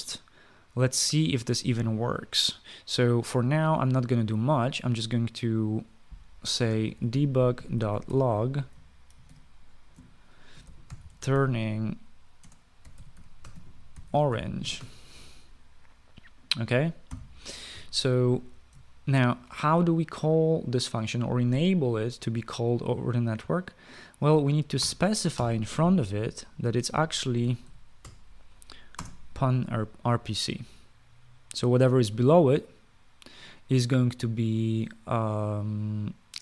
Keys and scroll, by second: 7.2-10.1 typing, 11.3-16.0 typing, 17.8 ;, 19.9 ctrl+s, 25.6 Return, 25.9-26.6 typing, 27.6-28.9 typing, 29.7 Return.